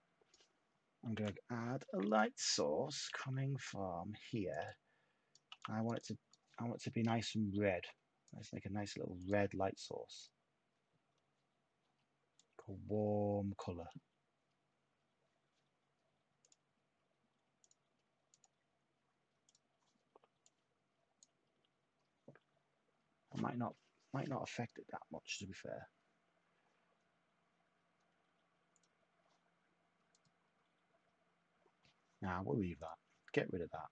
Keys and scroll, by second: 1.1-5.9 typing.